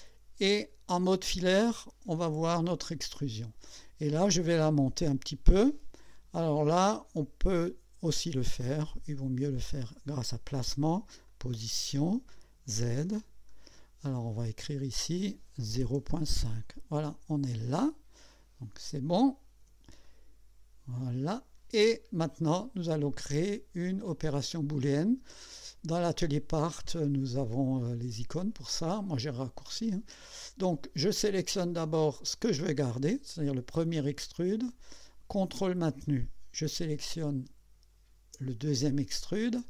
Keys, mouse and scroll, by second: 1.6-1.9 scroll up 1, 2.8 click, 9.9 click, 11.3 click, 12.3 click, 13.2 scroll up 2, 15.5-16.6 typing, 18.3 click, 20.0-21.7 drag, 32.0 click, 33.7 click, 36.8 ctrl+click.